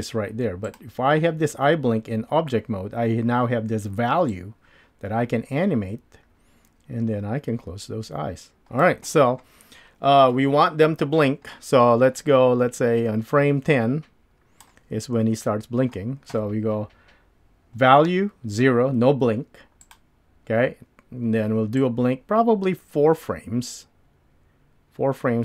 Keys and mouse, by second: 0.7 click, 21.8-25.4 drag.